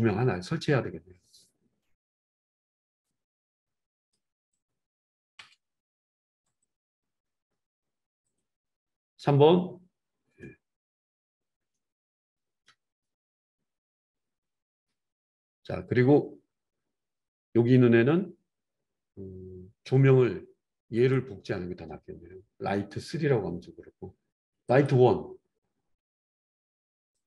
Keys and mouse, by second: 0.1-3.0 middle drag, 3.0-4.7 drag, 4.7-6.5 middle drag, 5.3 KP_7, 6.5 click, 6.8-8.3 middle drag, 8.3 click, 8.5-18.1 middle drag, 9.2 KP_3, 21.1 click, 22.5-24.8 middle drag, 24.8 click, 25.0-27.2 middle drag, 27.2 click.